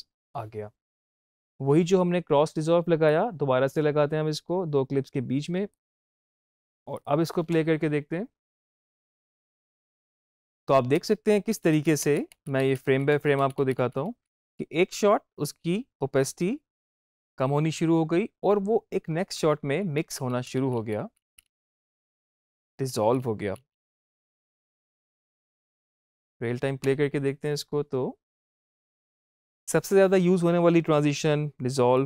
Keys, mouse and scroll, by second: 1.0 space, 3.0-6.9 drag, 7.4 space, 10.3 space, 10.4 Left, 19.9 Right, 25.5 click, 26.7 space, 29.3 space, 31.8 space.